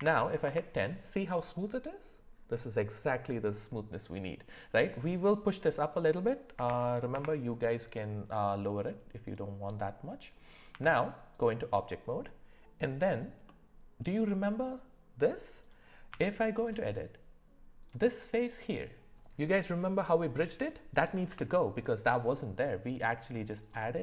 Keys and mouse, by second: 5.9-7.1 drag, 9.2-15.7 drag, 16.1 Tab, 17.8 click, 21.3 Delete.